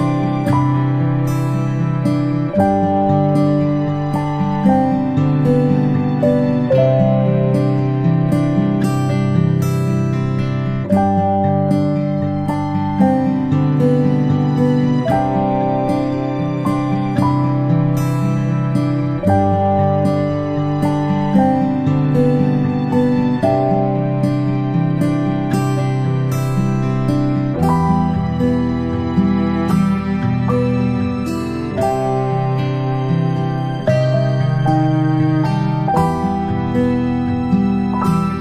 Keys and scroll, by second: 1.0-5.3 space, 10.5 ctrl+z, 18.8 ctrl+z, 37.7 ctrl+z.